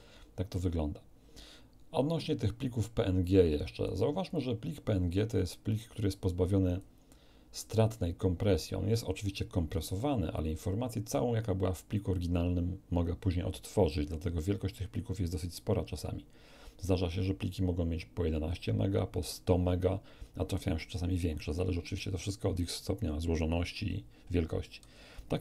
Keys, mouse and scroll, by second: 2.7-4.0 drag, 4.2 click, 5.3-7.0 drag.